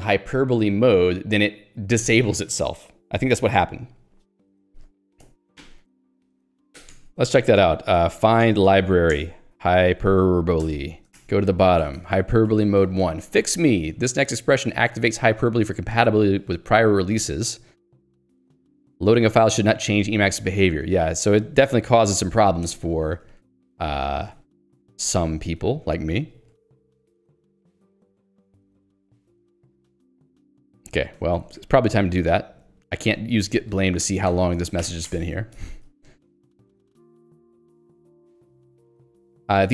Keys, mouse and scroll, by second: 5.2 Escape, 5.6 j, 7.7 ctrl+g, 8.1-13.8 typing, 9.4 Return, 10.7 Return, 22.6 Escape, 23.0 k, 24.8 j, 27.0 Escape, 30.7-31.6 typing, 32.3 Escape, 32.9 k, 33.7 j, 35.2 Return, 36.4 j.